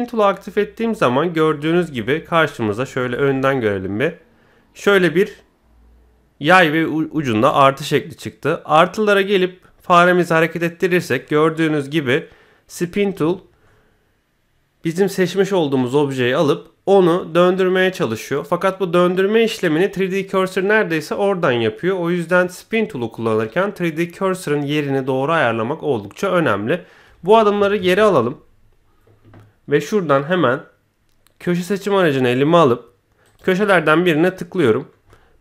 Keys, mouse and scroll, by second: 3.1 KP_1, 9.2-11.0 drag, 11.2-12.7 middle drag, 13.0-14.3 scroll up 3, 13.6-15.3 middle drag, 27.8 ctrl+z, 31.5 click, 33.2 click, 33.6-34.9 middle drag, 35.0 middle click.